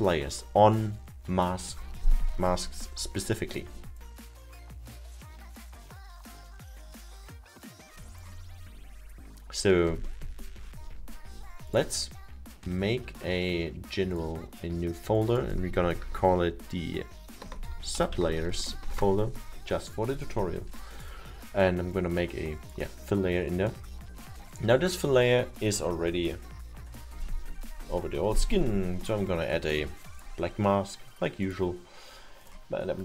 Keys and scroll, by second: 17.3-19.0 typing.